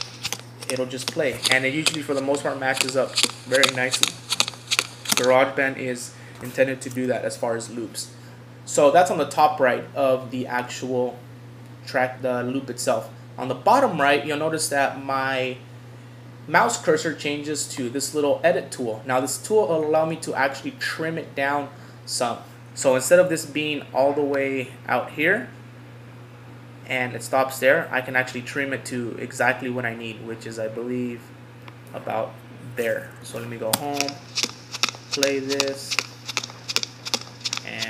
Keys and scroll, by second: 6.9 super+z, 33.2 Home.